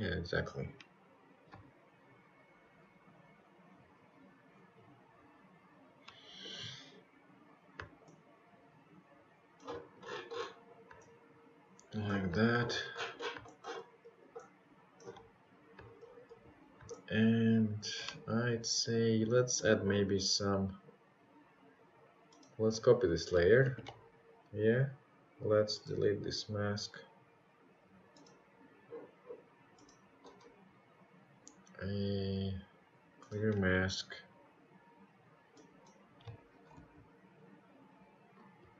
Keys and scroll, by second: 16.3 ctrl+c, 16.6 ctrl+v, 30.0 Delete, 32.6 ctrl+z.